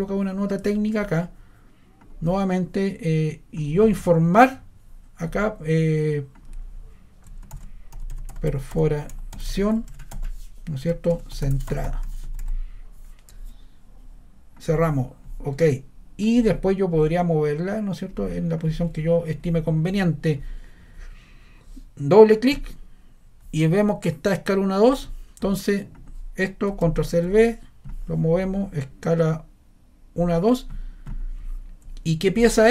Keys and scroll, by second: 7.2-12.9 typing, 10.8 Return, 26.8 super+c, 27.0 super+v.